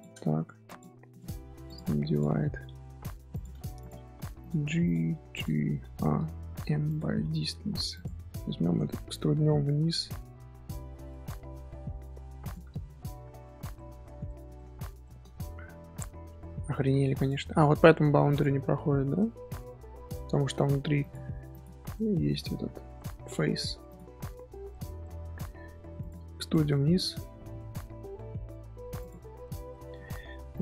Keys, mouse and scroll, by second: 0.6 click, 1.9 1, 2.1 click, 3.8 click, 4.8 click, 7.9 alt+click, 8.8-9.8 shift+middle drag, 9.8 e, 13.7-15.2 middle drag, 15.2 scroll down 1, 15.2-15.7 scroll up 3, 15.7 1, 17.1 click, 18.6 scroll down 1, 18.9 z, 19.1-20.4 middle drag, 20.4 z, 20.5 scroll up 1, 21.0 click, 21.5 click, 21.9 middle click, 22.7 z, 22.9-23.4 middle drag, 23.4 3, 23.8 alt+click, 24.2-24.9 middle drag, 24.9 scroll up 1, 25.0 middle click, 26.0 click, 26.5 e, 29.2 middle click, 30.1 2, 30.5 alt+click.